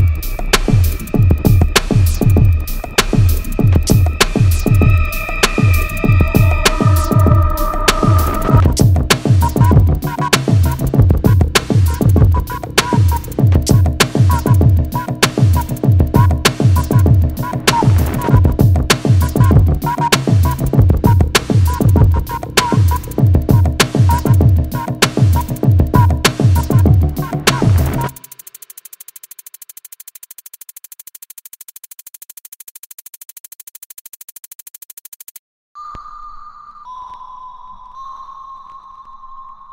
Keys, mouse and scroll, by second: 0.3 click, 1.3 click, 1.8 shift+middle click, 2.9 click, 4.2-6.0 typing, 6.8 Return, 8.9 middle click, 9.5-10.1 scroll down 1, 10.3 f, 10.7 click, 11.9 1, 13.8 click, 14.4 3, 16.1 click, 16.5 5, 17.5 Escape, 17.8-18.6 scroll up 1, 18.9 shift+middle click, 19.9-20.3 scroll down 1, 20.6 scroll up 1, 21.1 shift+middle click, 26.9-27.5 scroll up 1, 27.5-28.2 scroll down 1, 28.2 middle click, 28.9 shift+middle click, 30.7 click, 33.5 Escape, 37.0 click, 39.3 click.